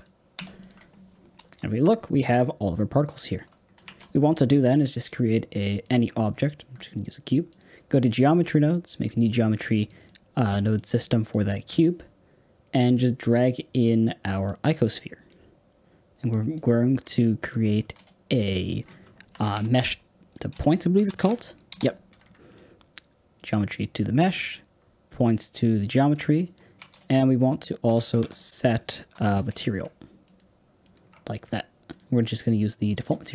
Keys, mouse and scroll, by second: 0.3 n, 0.5 click, 1.3 space, 1.7-2.1 scroll down 1, 2.1-3.2 middle drag, 3.2 space, 3.8 shift+a, 6.2-6.6 scroll down 7, 6.6 middle click, 7.5-11.6 drag, 11.6 x, 12.7 click, 13.7 click, 14.5 click, 24.4 click, 26.1 click, 32.9-33.3 drag.